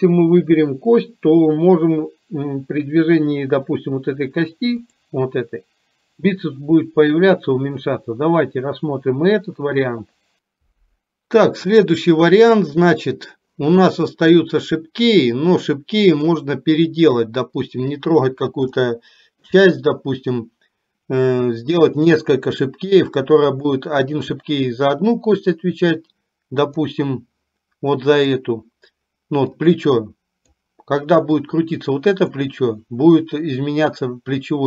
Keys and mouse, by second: 5.0 click, 16.1 click, 19.0 shift+middle click, 23.5 click, 26.8 click, 28.0 click, 29.6-30.6 drag, 31.5-32.5 drag.